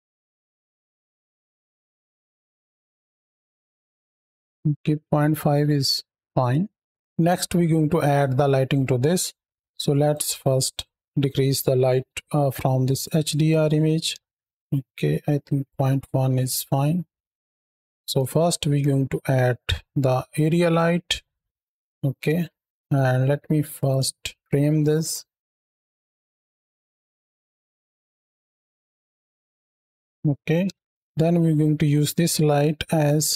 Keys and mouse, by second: 0.0 click, 0.2 shift+middle click, 0.4 space, 0.5 space, 0.7-1.8 middle drag, 2.4 click, 4.0 middle click, 6.5 middle drag, 7.1-7.6 middle drag, 9.9-11.0 drag, 11.7 middle click, 12.8-14.4 drag, 14.5-16.4 middle drag, 17.5 shift+middle click, 18.2 shift+a, 22.0 KP_3, 22.8-23.5 middle drag, 23.9 shift+middle drag, 24.3 shift+middle click, 24.6 click, 25.2 ctrl+click, 25.8 ctrl+alt+KP_0, 26.3 ctrl+space, 27.3 n, 27.7 click, 28.0 click, 28.1 ctrl+middle click, 29.1 drag, 29.5 n, 29.7 ctrl+space, 30.0 z, 30.5 KP_3, 30.9 r, 32.8 r.